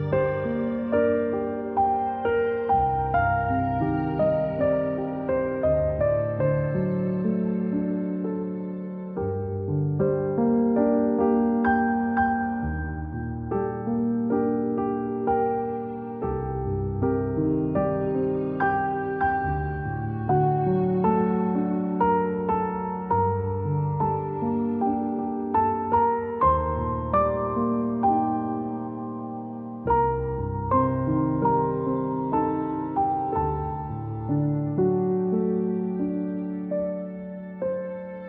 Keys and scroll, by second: 4.1 =, 5.0-5.4 space, 5.8 a, 8.2 c, 10.6 z, 11.3-11.7 space, 12.1 =, 13.0 a, 14.4 ctrl+z, 15.2 a, 15.8 c, 17.1 a, 20.3-22.2 typing, 25.1 space, 25.3 space, 25.5 space, 29.5 space, 32.6-35.3 typing, 37.5 v, 38.1 space.